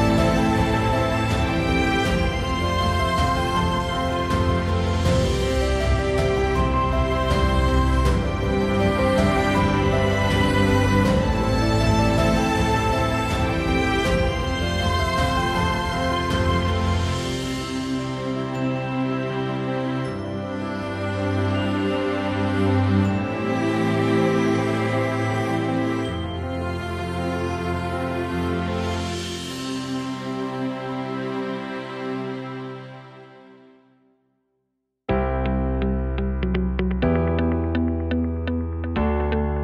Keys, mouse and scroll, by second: 1.8-2.8 right drag, 7.5-9.8 right drag, 9.9-11.2 right drag, 16.4-19.9 right drag, 21.5 Tab, 21.7 a, 31.2 Tab, 33.8 shift+s, 36.1 shift+a.